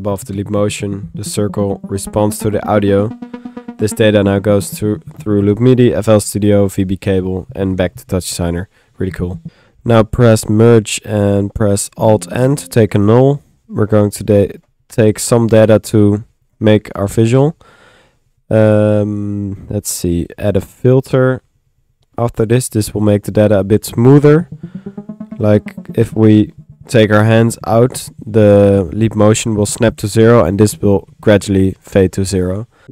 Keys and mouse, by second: 9.5 click, 10.4 click, 11.9 alt+n, 12.6 alt+n, 12.6 alt+click, 12.7 typing, 13.0 alt+click, 14.2 click, 14.8 click, 16.0 click, 16.7 click, 17.5-19.5 drag, 19.5 middle click, 20.5 click, 21.1 Tab, 21.3 f, 22.5 click, 23.1 click, 32.6-32.9 typing.